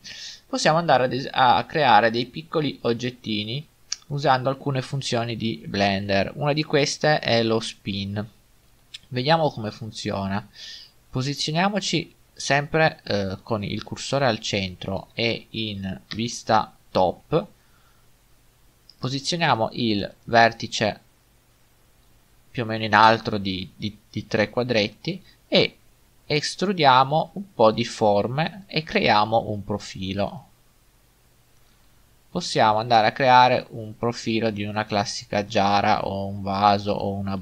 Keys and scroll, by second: 0.8 g, 16.2 7, 22.1 g, 33.7 typing, 34.8-35.5 typing.